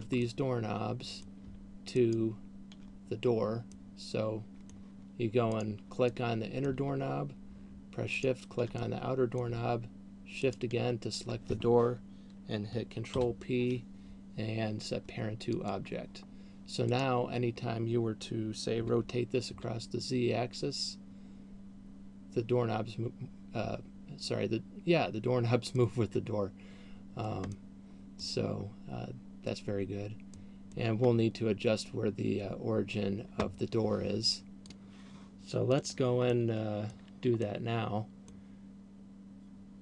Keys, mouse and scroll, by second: 0.2 shift+right click, 0.2 middle click, 2.2 shift+right click, 4.2 middle click, 5.7 right click, 6.2 middle click, 8.4 shift+right click, 9.2 middle click, 10.9 shift+right click, 13.4 ctrl+p, 17.4 right click, 19.2 r, 26.2 middle click, 27.9 middle click, 30.7 middle click, 31.7-32.2 scroll down 2, 36.7 middle click, 38.2 middle click.